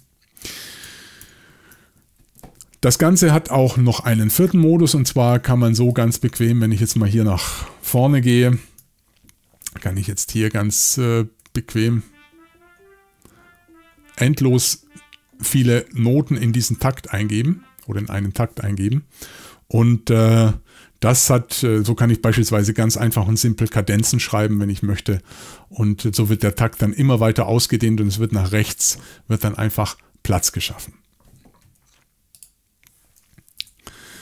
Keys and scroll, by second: 0.4 super+z, 0.8 super+z, 1.2 super+z, 7.4 Left, 8.4 super+Left, 9.9-10.3 typing, 11.4 typing, 31.6 Escape, 33.6 BackSpace.